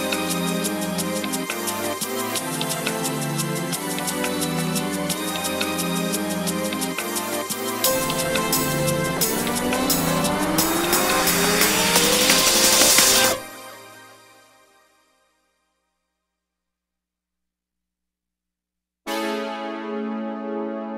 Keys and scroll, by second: 0.0 Escape, 2.2 Escape, 19.5 Escape.